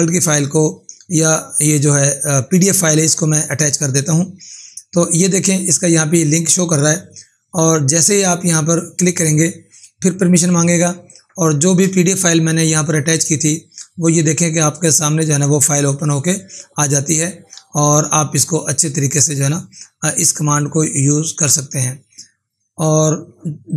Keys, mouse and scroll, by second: 9.0 click, 14.7 scroll down 1, 15.4-16.0 scroll down 1, 16.0 scroll down 1, 21.2 click, 22.9 click.